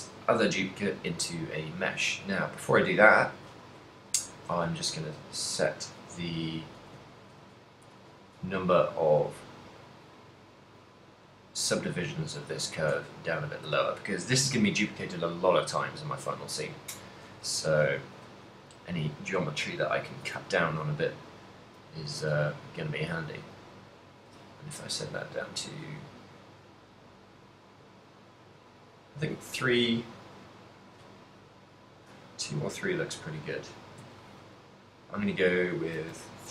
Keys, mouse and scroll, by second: 6.3 middle click, 7.0 ctrl+middle click, 7.4 z, 7.8 z, 10.8 click, 11.3 click, 12.3 click, 12.9 click, 12.9 z, 13.3 middle click, 13.8 z, 15.3 middle click, 15.6 click, 17.3 KP_7, 18.1 z, 20.1 middle click, 20.4 z, 20.9 middle click, 21.6 middle click, 22.2 z, 22.8 middle click, 24.0 middle click, 24.2 z, 25.2 click, 25.8 middle click, 26.8 middle click, 27.4 middle click, 30.3 click, 31.8 click, 32.4 middle click, 33.4 z, 34.0 z, 35.1 click, 36.2 z.